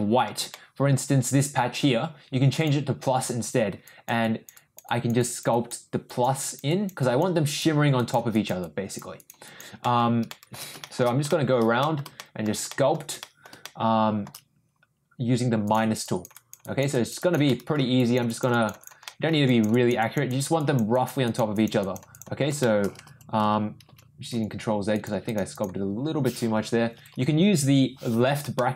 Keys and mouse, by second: 0.5 middle click, 2.5 click, 3.8 click, 4.2 click, 4.5 click, 4.8 click, 5.2 click, 5.5 click, 6.1 click, 6.4 click, 6.7 click, 7.0 click, 7.4 click, 8.0 click, 8.3 click, 8.6 click, 9.1 click, 9.4 click, 9.8 middle click, 10.3 shift+middle click, 10.8 shift+middle click, 11.3 shift+middle click, 11.8 middle click, 12.1 shift+middle click, 12.7 shift+middle click, 13.2 middle click, 13.6 shift+click, 15.6 click, 16.0 click, 16.3 click, 16.6 click, 16.9 click, 17.2 click, 17.5 middle click, 17.9 click, 18.3 click, 18.5 click, 18.8 click, 19.0 middle click, 19.4 click, 19.7 click, 20.0 click, 20.3 click, 20.5 click, 20.9 click, 21.2 click, 21.5 click, 21.8 click, 22.1 click, 22.6 shift+middle click, 24.9 ctrl+click, 25.2 ctrl+click, 25.5 ctrl+click, 26.8 ctrl+[, 26.9 ctrl+[, 27.1 ctrl+[, 27.7 ctrl+[, 28.5 middle click.